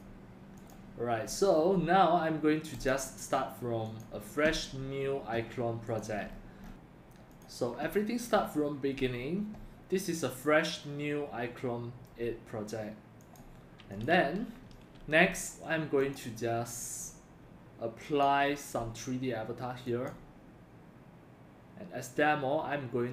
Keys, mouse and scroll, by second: 0.8 click, 3.1 click, 4.8 drag, 6.3 scroll down 3, 6.6 scroll up 2, 10.8-11.2 drag, 15.2 drag, 16.0 click, 18.0 click, 19.9 click.